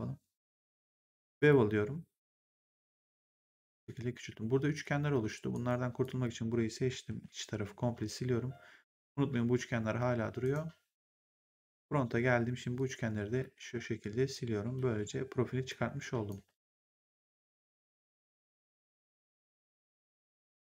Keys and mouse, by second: 1.3 click, 2.7 click, 5.4 right click, 5.9 click, 7.0 Delete, 10.3 right click, 10.9 click, 12.7 click, 13.5 Delete, 14.2 click, 14.8 Delete, 15.6 click, 16.3 Delete, 17.6 click, 18.2 Delete, 18.5 click, 19.5 Delete, 20.4 click.